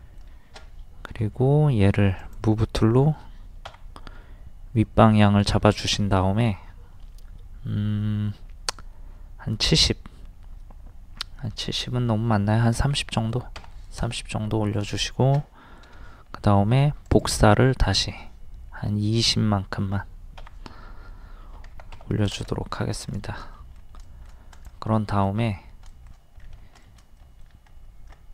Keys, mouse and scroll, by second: 1.1 m, 2.2 click, 3.7 Up, 12.8 KP_3, 14.5 scroll up 1, 15.8 m, 17.1 ctrl+click, 20.4 Up, 21.5 KP_2, 21.8 KP_0, 22.7 scroll down 1, 24.6 click, 25.0 middle click, 26.7 scroll up 1, 26.9 shift+middle click, 27.7 scroll up 1.